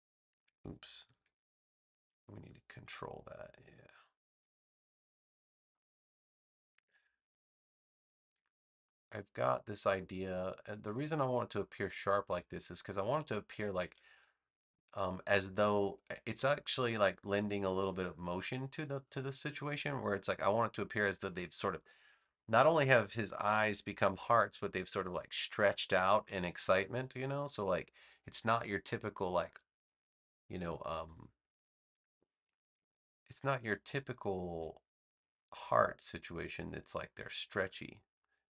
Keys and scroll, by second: 1.1 super+z.